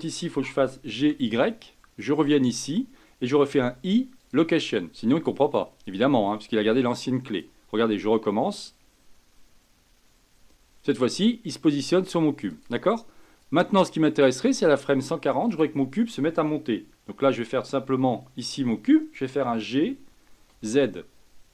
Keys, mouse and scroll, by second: 0.5 g, 3.5 i, 5.8 click, 7.3 click, 12.5-15.6 drag, 19.4 g.